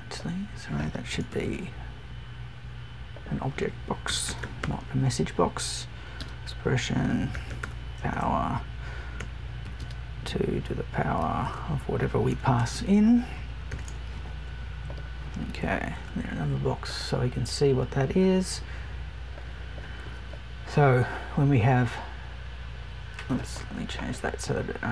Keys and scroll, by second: 1.1 BackSpace.